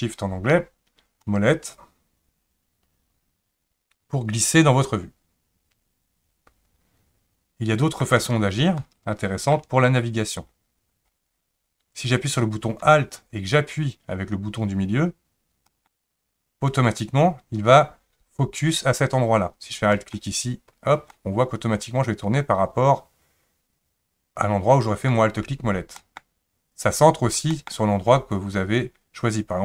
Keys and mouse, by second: 1.2-8.0 shift+middle drag, 8.8-9.5 middle drag, 15.8 alt+middle click, 20.1 alt+middle click, 21.1-25.1 middle drag, 26.0 alt+middle click, 27.5 alt+middle click.